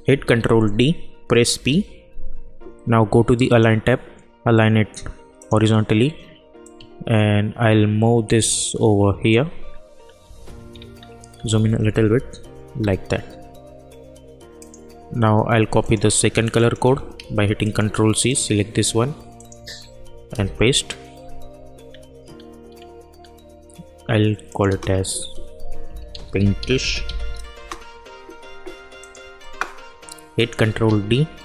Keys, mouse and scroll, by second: 0.1 ctrl+d, 1.5 p, 3.4-10.2 drag, 10.2 Down, 10.6-11.3 scroll up 1, 11.3 Down, 14.5 click, 17.1 ctrl+c, 17.6 click, 19.7 ctrl+v, 20.3 Return, 21.8-22.7 scroll down 1, 22.7-23.1 scroll up 1, 23.1-24.4 scroll down 1, 24.4 click, 24.6 Return, 25.6-27.5 typing, 27.5 Return, 29.0 click, 30.8 ctrl+d.